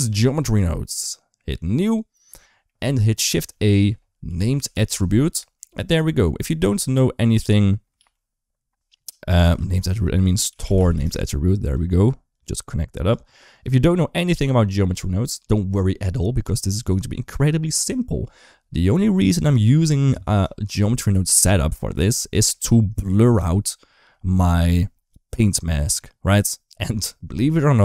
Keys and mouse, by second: 1.8 click, 2.6 middle click, 3.2 shift+a, 7.8 ctrl+z, 9.3 ctrl+x, 9.7 shift+a, 12.1 click, 12.2 click, 13.3-14.6 drag, 14.9 shift+middle click, 16.2 click, 16.7 click, 18.8 shift+middle click, 21.3 shift+middle click, 22.1 shift+middle click.